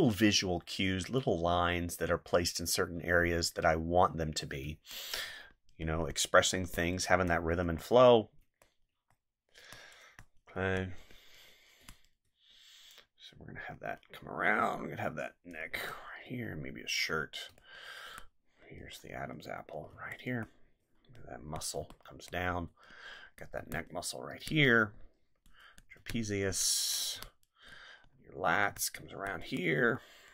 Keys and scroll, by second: 4.6 space, 7.1 space, 11.8 space, 14.6 space, 17.5 space, 19.9 space, 21.8 space, 23.6 space, 26.0 space, 28.7 space.